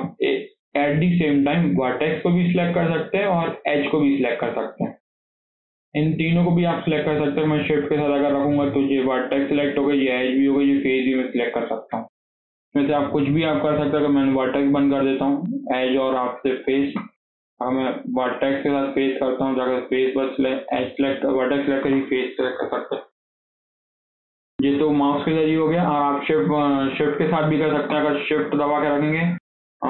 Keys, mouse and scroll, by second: 2.0 click, 3.2 click, 4.0 scroll up 3, 4.2-6.3 shift+middle drag, 6.3 shift+click, 9.1 click, 9.8 click, 10.4 click, 13.8 shift+click, 15.4 click, 16.2 click, 17.7 click, 18.7 shift+click, 19.6 click, 21.8 click, 22.5-23.3 scroll down 6, 23.3-26.2 shift+middle drag, 26.2 click, 27.2-29.8 shift+middle drag.